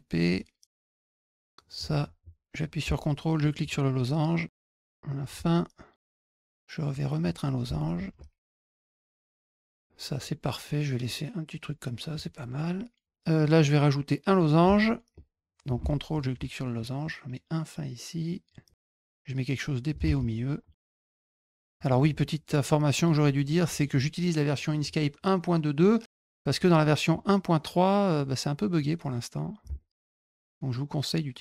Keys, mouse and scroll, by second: 0.1 click, 1.2 click, 3.3 ctrl+click, 3.9-5.1 drag, 6.0 click, 6.8 click, 7.9 ctrl+click, 8.4 click, 8.7 click, 8.8 click, 9.0 click, 9.2 click, 9.3 ctrl+alt+click, 9.5 click, 9.7 middle click, 10.6 click, 12.1 click, 16.1 ctrl+click, 16.7-18.4 drag, 18.9 ctrl+click, 19.0 click, 21.3 click, 21.4 click, 22.7 click, 23.6 click, 25.7 click, 28.1 click, 29.7 ctrl+click, 30.0-31.4 drag.